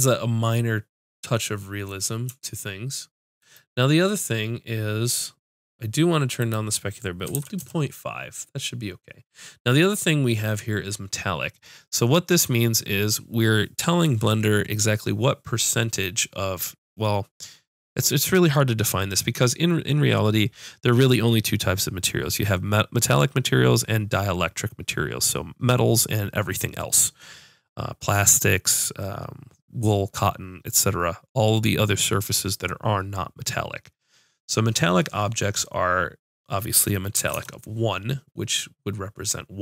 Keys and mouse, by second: 1.0 middle click, 7.4-9.0 drag, 36.3-39.6 drag.